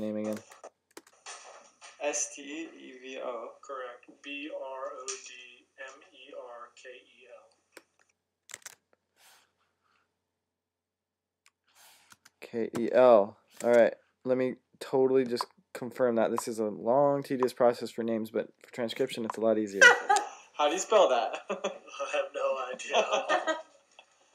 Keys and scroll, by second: 8.4 Tab, 13.4 Tab.